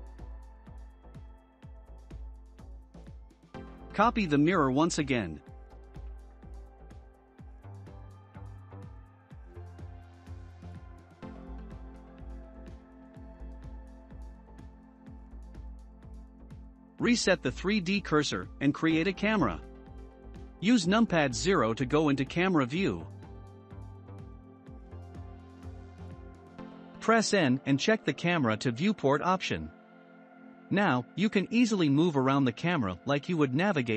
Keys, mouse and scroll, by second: 0.8 click, 1.5 shift+click, 2.1 shift+click, 3.0 shift+click, 4.6 ctrl+1, 6.7 click, 7.1-7.5 scroll down 2, 7.5-10.6 shift+middle drag, 11.7-12.1 middle drag, 12.1-12.7 scroll up 1, 12.7-14.4 shift+middle drag, 14.4 scroll down 1, 14.6-15.9 middle drag, 15.9 shift+c, 17.3 shift+a, 21.3 scroll up 2, 22.7 KP_0, 24.4 n, 26.2 click, 27.8 click, 29.6-31.7 scroll down 16, 31.7-33.9 middle drag.